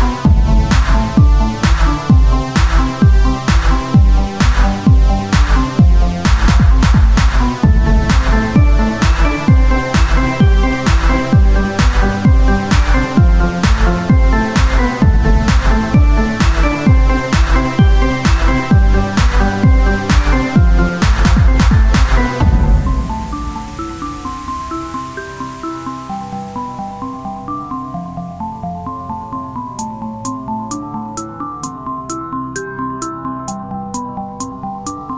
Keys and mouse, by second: 0.6 KP_3, 0.9 z, 1.8 c, 4.0-17.5 drag, 17.5 c, 20.9 KP_Divide, 23.5 x, 25.4 click, 26.0 x, 28.2 click, 29.2 KP_3, 29.6 KP_1, 30.0 z, 30.7 c, 32.7-35.1 drag, 33.0 z.